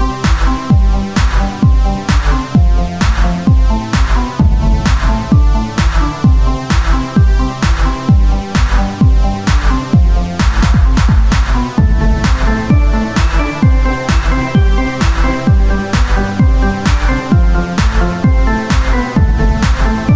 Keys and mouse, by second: 0.1 s, 0.9-2.2 drag, 2.2 Tab, 4.1-7.6 drag, 7.6 Tab, 9.9-11.6 middle drag, 11.6-12.7 drag, 12.7 Tab, 13.6 s, 17.6-18.6 drag, 18.6 Tab.